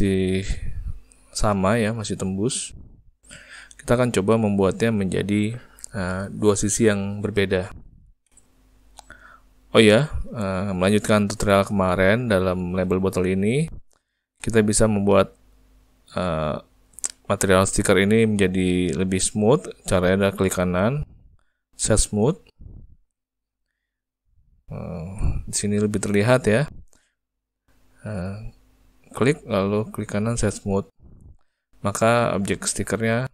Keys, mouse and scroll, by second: 3.7 middle click, 9.5 middle click, 10.5 ctrl+middle click, 14.4 click, 20.7 right click, 24.5 z, 28.4 click, 29.5 right click.